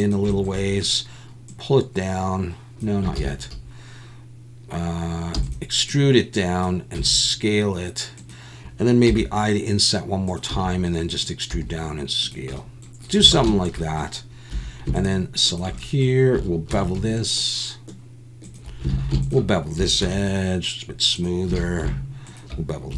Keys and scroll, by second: 0.0 i, 3.2 ctrl+z, 5.3 e, 7.0 s, 9.1 i, 10.5 e, 11.5 s, 13.3 alt+a, 14.5 2, 16.7 ctrl+b, 18.9 alt+a, 20.0 ctrl+b, 21.6 alt+a.